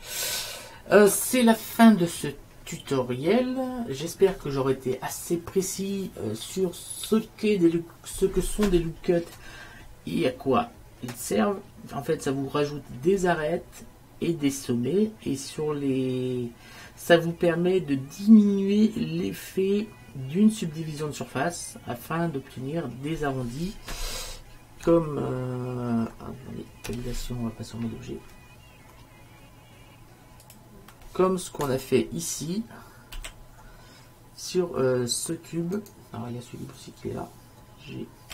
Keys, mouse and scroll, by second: 27.0 Tab, 33.2 alt+h, 36.2 right click.